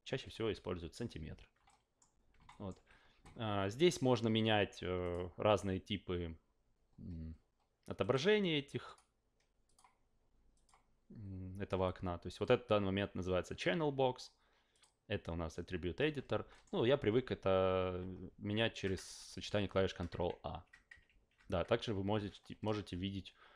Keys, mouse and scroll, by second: 1.6-2.0 alt+middle drag, 2.5 alt+middle drag, 5.0 click, 8.0 click, 8.8 click, 9.6 click, 10.5 click, 14.7 click, 16.5 alt+middle click, 17.1 ctrl+a, 18.5 ctrl+a, 19.7 ctrl+a, 20.2 ctrl+a, 21.0 ctrl+a, 22.1 ctrl+a.